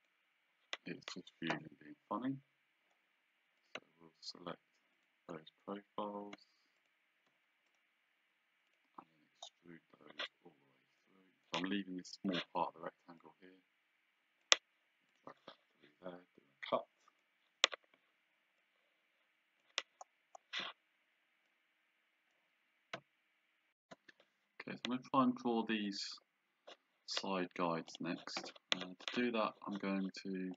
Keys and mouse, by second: 0.0 click, 0.9 Escape, 3.6 click, 5.0 shift+click, 6.8 shift+click, 7.7 right click, 8.7 click, 11.1 click, 13.3 click, 15.2 click, 17.1 click, 18.7 click, 21.5 click, 24.5 shift+z, 28.0 click.